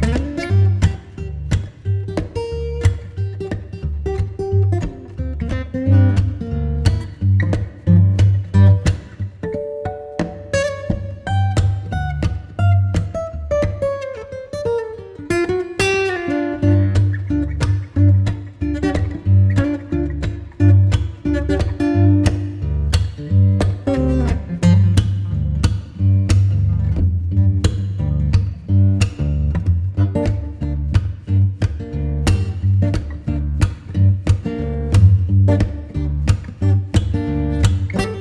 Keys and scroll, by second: 1.0 [, 3.7 v, 5.1 space.